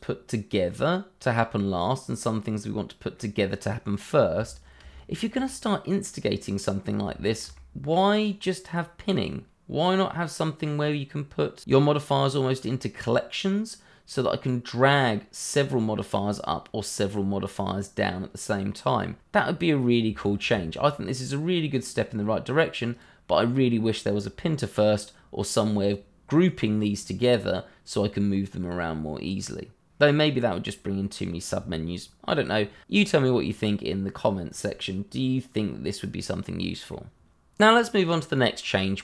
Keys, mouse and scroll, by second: 4.9 shift+middle click, 5.0 middle click, 5.1 shift+middle click, 5.5-5.8 scroll up 1, 5.8 middle click, 7.2 shift+middle click, 7.2 middle click, 7.3 shift+middle click, 7.8 middle click, 17.6-18.0 scroll down 1, 18.0 middle click, 20.2 shift+middle click, 22.9 click, 33.2-34.0 scroll down 1, 35.4 scroll up 1, 37.0 middle click, 38.2 click.